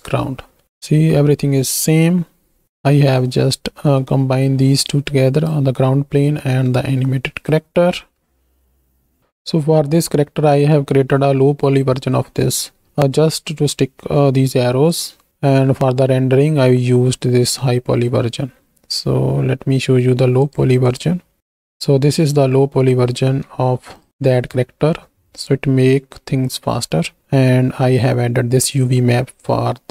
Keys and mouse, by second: 1.7 click, 5.0-5.7 drag, 6.9 click, 8.9 middle click, 9.7-11.6 middle drag, 12.4 middle click, 14.9 click, 15.6-16.6 middle drag, 20.4 click, 21.6 drag, 22.3 z, 23.3 z, 24.0 click, 24.2 shift+drag, 24.6-26.2 drag, 29.6-29.9 drag.